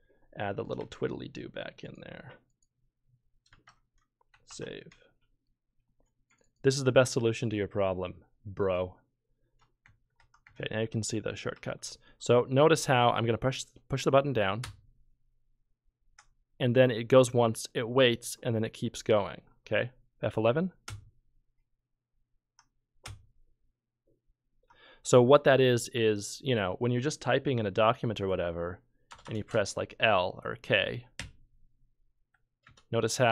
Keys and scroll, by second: 0.8 shift+`, 3.5 shift+`, 4.5 ctrl+s, 9.8 F12, 10.2 F11, 10.4 F12, 11.5 F11, 14.6 F12, 20.9 F11, 23.0 F11, 29.1 Return, 29.2 Return, 31.2 k, 32.6 Return.